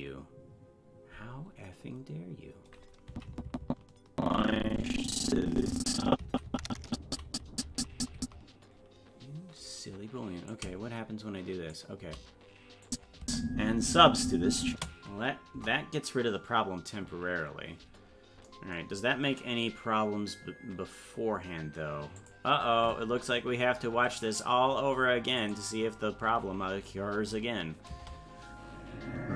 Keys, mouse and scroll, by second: 3.1-6.3 Left, 6.3 Right, 10.5-11.7 drag, 12.9 click, 13.2 space, 15.6 KP_0, 19.0-19.6 scroll down 10, 22.2 click, 25.4 click, 27.9 space.